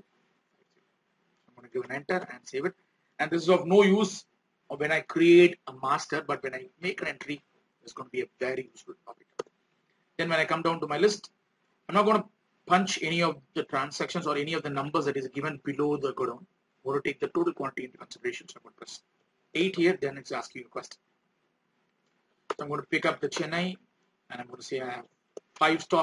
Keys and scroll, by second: 9.8 alt+Tab, 18.5 alt+Tab, 23.7 alt+Tab.